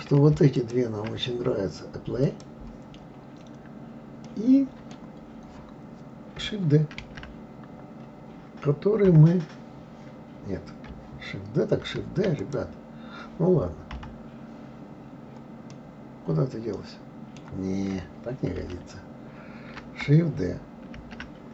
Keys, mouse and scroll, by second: 0.6 shift+click, 2.2 click, 4.2-7.0 middle drag, 7.0 shift+d, 13.9 KP_3, 15.7-18.6 middle drag, 18.6 ctrl+z, 21.0 shift+d.